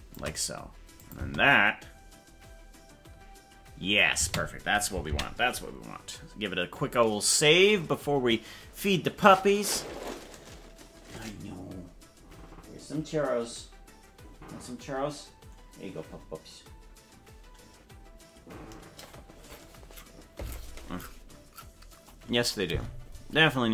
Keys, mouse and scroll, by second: 1.0 click, 1.2 space, 4.2 space, 7.1 ctrl+s.